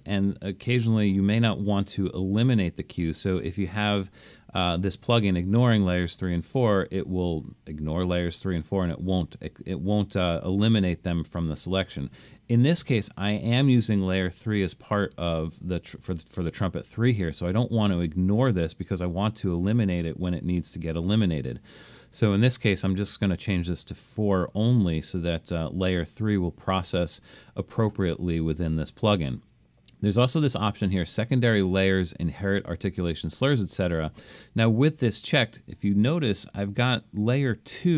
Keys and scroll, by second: 20.6 BackSpace.